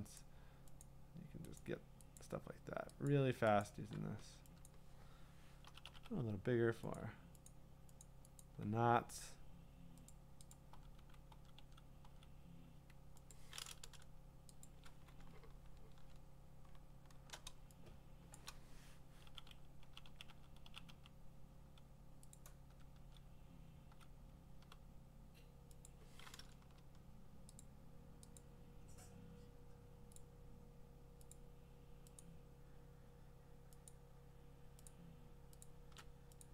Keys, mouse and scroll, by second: 0.8 alt+click, 1.6 alt+click, 2.2 alt+click, 3.1 alt+click, 3.6 alt+click, 8.0 ], 8.1 click, 8.4 click, 10.1 click, 10.5 click, 11.0 [, 11.3 [, 11.6 [, 12.0 [, 13.3 click, 14.6 shift+click, 15.3-17.3 scroll, 18.4 click, 19.3-20.9 typing, 22.3 click, 22.7 [, 23.0 [, 23.9 [, 24.6 ], 25.9 click, 27.6 shift+click, 28.4 shift+click, 30.2 shift+click, 31.3 shift+click, 32.2 shift+click, 34.9 alt+click, 35.6 alt+click.